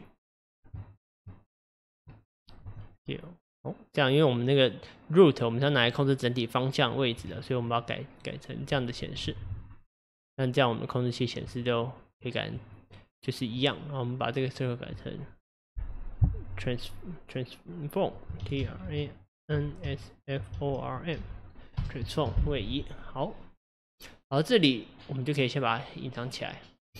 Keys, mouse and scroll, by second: 0.0 click, 1.0 shift+click, 1.7 shift+click, 2.7 s, 6.1-7.3 middle drag, 7.3 Tab, 7.8-8.3 scroll down 1, 9.2 KP_Divide, 10.1 click, 11.5 Tab, 14.3 click, 14.6-17.7 drag, 25.5 click, 26.3 click.